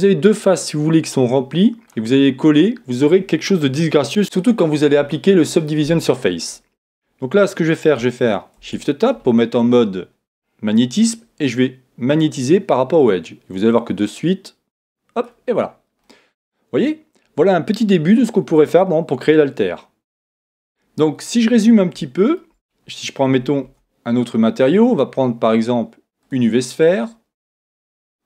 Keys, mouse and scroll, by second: 8.6 shift+Tab, 10.9 click, 13.5 click, 15.6-17.8 middle drag, 22.0-23.9 middle drag, 23.6 shift+a, 28.1 click.